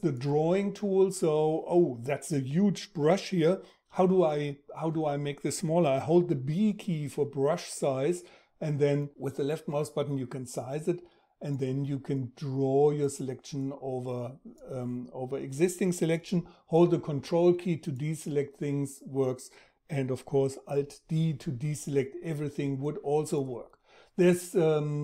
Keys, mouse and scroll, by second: 20.5 alt+d.